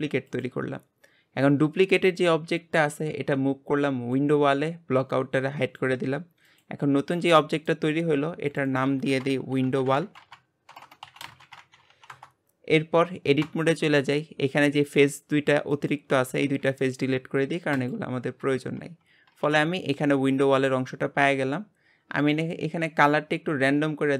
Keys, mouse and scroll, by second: 0.3 click, 2.7 click, 5.6 click, 6.4 click, 7.1 g, 8.5 click, 8.7-10.8 drag, 10.8 BackSpace, 11.9 l, 13.4 Tab, 14.8 click, 15.7 shift+click, 16.4 x, 18.8 Tab, 19.4 g, 22.2-24.1 drag.